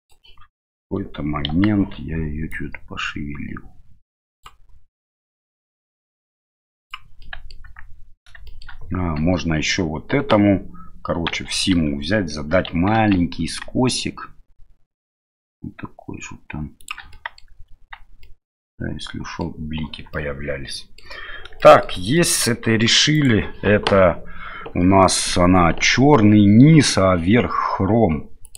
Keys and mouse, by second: 0.0 click, 1.5 KP_1, 2.5-4.5 drag, 5.9-6.9 drag, 7.3 middle click, 7.7 Tab, 8.5 shift+middle click, 11.3 a, 11.7 a, 13.0 ctrl+b, 17.2 middle click, 17.5 Tab, 18.2-19.4 middle drag, 20.1 middle click, 21.6 shift+middle click, 22.2 middle click, 23.1 right click, 28.4 click.